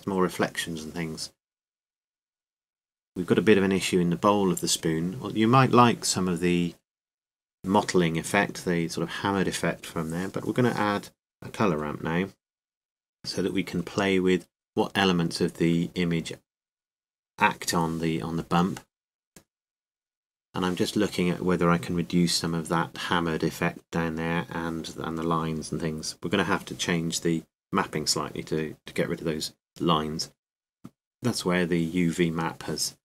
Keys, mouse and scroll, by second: 14.6 click, 15.9 click, 16.7-17.8 drag, 26.7 middle click, 28.7-31.5 middle drag, 32.6-33.0 drag.